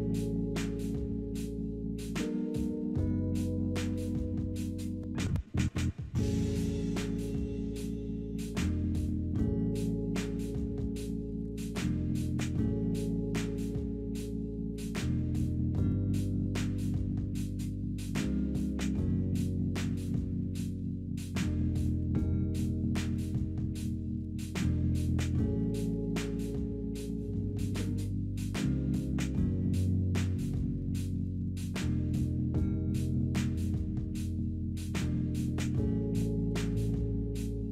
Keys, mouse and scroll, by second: 10.9-12.2 scroll up 2, 12.2 scroll up 1, 12.3-14.2 scroll down 2, 14.2 scroll, 14.3-15.2 scroll up 2, 15.4-18.6 scroll down 2, 28.1 ., 28.5 2, 29.0 Return, 32.9-34.1 typing.